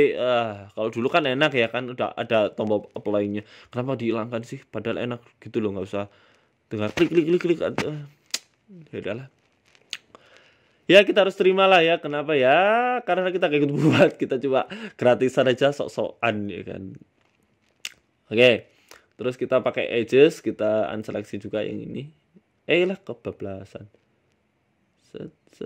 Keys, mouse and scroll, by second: 0.9 KP_1, 2.4 click, 3.4 click, 5.4 middle click, 6.3 middle click, 6.7 a, 6.8 a, 7.4 alt+shift+right click, 8.2 middle click, 8.8 KP_1, 9.8 click, 11.2 click, 14.0 c, 15.4 shift+middle click, 17.3 c, 19.0 shift+middle click, 20.3 click, 21.2 c, 23.8 ctrl+z, 24.4 c.